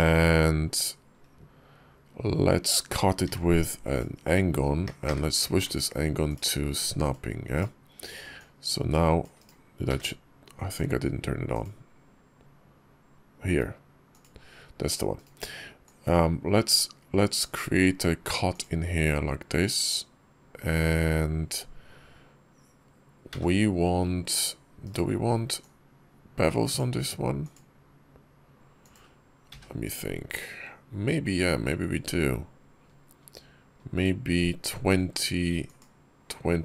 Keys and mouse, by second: 0.1 shift+v, 3.1 d, 4.9 d, 5.4 d, 8.2 click, 9.7 d, 15.7-17.3 drag, 25.4-26.6 drag.